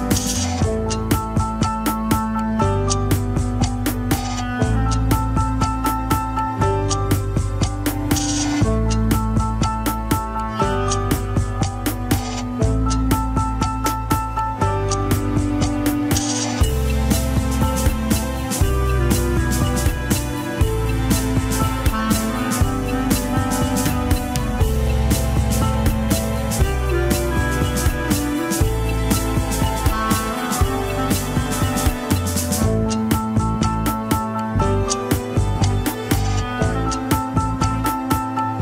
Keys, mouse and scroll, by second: 0.0 Tab, 0.1 alt+z, 0.3-1.0 middle drag, 1.0 click, 1.4 click, 1.9 Tab, 2.6 click, 3.4-4.6 middle drag, 4.6 click, 5.2 shift+s, 5.6 alt+z, 5.8 middle click, 6.2 Tab, 6.5 click, 7.0 Tab, 7.7 r, 9.2 middle click, 9.5 r, 13.2 KP_1, 13.6 Tab, 13.7 alt+z, 14.2 click, 14.6 click, 15.6 click, 16.0 Tab, 16.4 g, 17.7-18.8 middle drag, 18.8 ctrl+l, 19.4 g, 20.6-21.7 middle drag, 21.7 click, 22.2 shift+s, 22.7 KP_1, 23.0 alt+z, 23.4 Tab, 23.5 click, 23.8 Tab, 24.2 r, 26.7-28.8 scroll down 3, 29.8 ctrl+Tab, 31.2 shift+a, 35.6-36.0 scroll down 5, 36.3 s, 37.2 scroll up 2, 37.3 alt+z, 37.8 s.